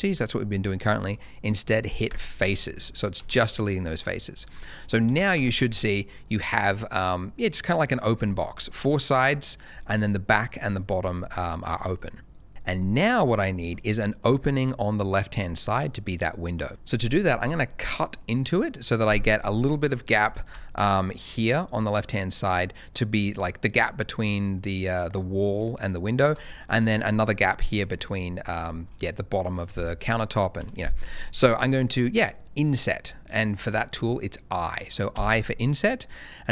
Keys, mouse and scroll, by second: 2.0 click, 2.6 middle click, 2.8-3.1 scroll up 1, 3.1 Tab, 3.9 middle click, 5.0 Tab, 5.3 a, 5.6 middle click, 7.6 middle click, 8.0-8.3 scroll down 1, 8.3 middle click, 13.6 click, 13.9 middle click, 15.2-16.7 scroll up 1, 20.8 ctrl+shift+a, 20.9 shift+click, 21.8 ctrl+shift+a, 26.5 middle click, 29.5 ctrl+shift+a, 30.6 Escape, 31.2 middle click, 35.1 i.